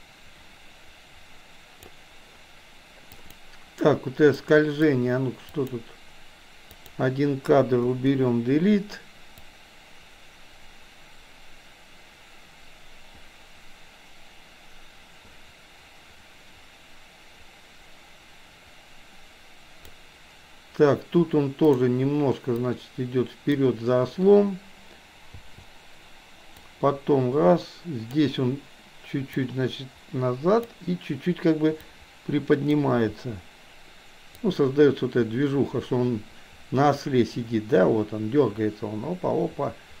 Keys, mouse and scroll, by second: 3.1 click, 4.5-4.9 drag, 5.5 click, 6.8 drag, 7.9 Delete, 9.5-19.9 drag, 21.8 click, 22.6-23.8 drag, 25.4 i, 26.6-28.3 drag, 29.4 click, 30.0 click, 32.0 click, 33.1 i, 34.5-40.0 drag.